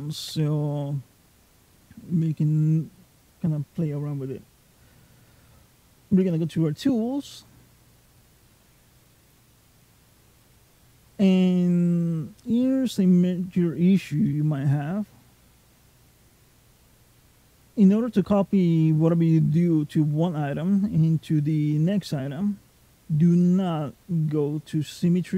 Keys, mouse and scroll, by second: 0.1 n, 6.0 click, 8.8 click, 9.5 click, 10.2 click, 12.3 middle click, 13.8 scroll down 1, 14.1 middle click, 17.7 middle click.